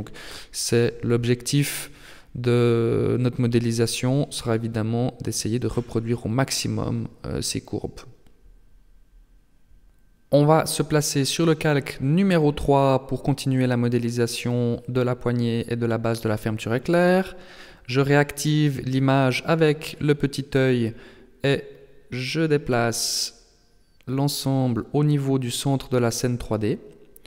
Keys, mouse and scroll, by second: 2.6 middle click, 8.1 ctrl+s, 12.5 click, 14.2 KP_7, 16.0 n, 18.5 click, 20.2 click, 20.5-22.5 scroll down 6, 22.5 click, 26.3 click.